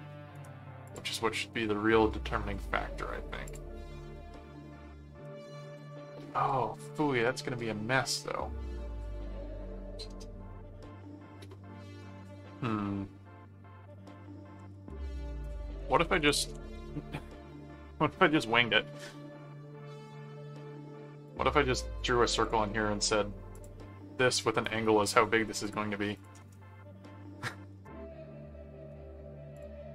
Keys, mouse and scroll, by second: 0.3 right click, 0.8 click, 3.4 click, 14.4-17.0 typing, 17.5 Return, 18.9 click, 21.2 click, 22.4 click, 23.5 click, 24.3 click, 24.8 right click, 25.6 click, 29.5 click.